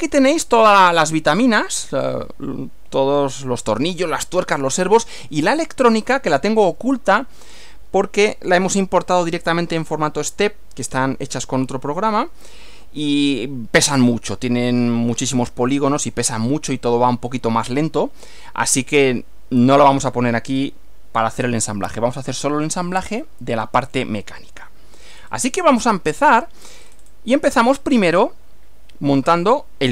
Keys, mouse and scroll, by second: 23.2-24.9 shift+middle drag, 25.2-25.5 shift+scroll up 3, 25.8-26.9 shift+middle drag, 26.9-27.3 shift+scroll up 1.